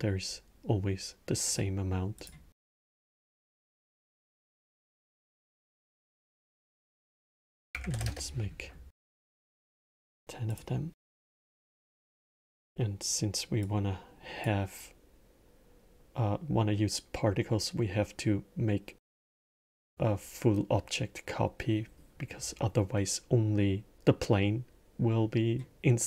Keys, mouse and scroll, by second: 1.3 shift+a, 2.9 drag, 4.5 click, 6.7-9.6 drag, 10.3 click, 11.7-13.5 middle drag, 13.5 click, 19.5 click, 25.9-26.0 middle drag.